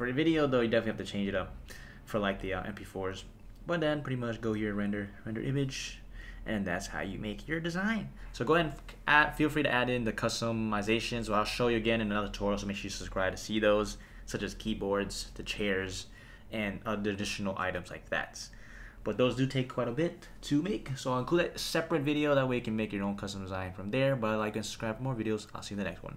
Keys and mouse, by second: 4.7-5.4 drag.